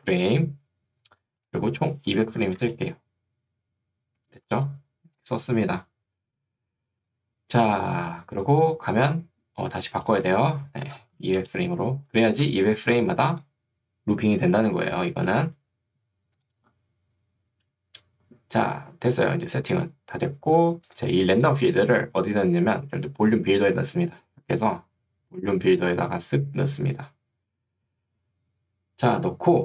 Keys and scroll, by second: 2.2 2, 2.6 Return, 4.6 ctrl+2, 6.4 Escape, 11.0 0, 11.4 Return, 12.6 ctrl+2, 15.0 Escape.